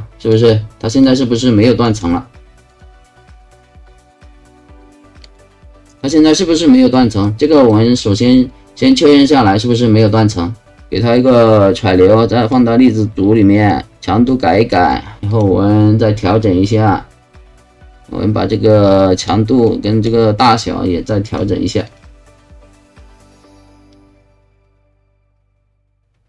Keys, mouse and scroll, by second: 1.1 alt+click, 2.7 alt+click, 5.3 alt+click, 5.9-6.9 alt+drag, 7.3 alt+right click, 8.0-10.8 alt+drag, 11.5-12.5 drag, 13.5 click, 14.3 click, 15.3 click, 18.7 click, 19.7 click, 21.3 click, 21.9 click.